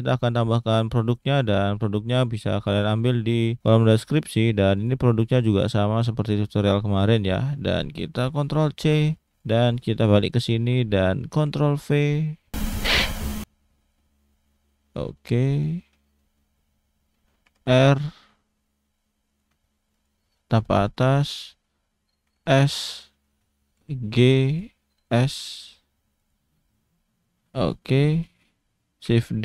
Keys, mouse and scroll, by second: 7.6 click, 9.1 click, 13.0-13.4 scroll up 3, 13.4 click, 13.9 click, 15.5 click, 15.9 scroll up 2, 16.2 shift+middle click, 16.5-17.3 scroll down 1, 17.4 r, 19.9 click, 20.3-21.2 scroll down 4, 20.8 shift+middle click, 21.2-22.3 scroll up 3, 22.3 s, 23.2 shift+middle click, 23.8 g, 25.1 s, 29.3 shift+d.